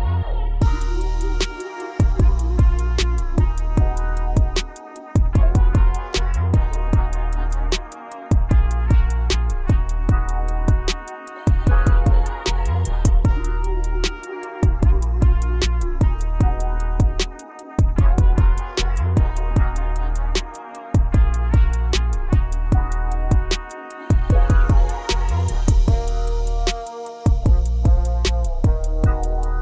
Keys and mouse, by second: 1.2 KP_Add, 1.3 KP_Add, 4.6 KP_Add, 9.3 click, 12.3 right click, 13.0 right click, 15.2 right click, 16.2 right click, 19.1 right click, 20.0 right click, 22.7 click, 24.6 right click, 25.8 right click, 28.7 right click.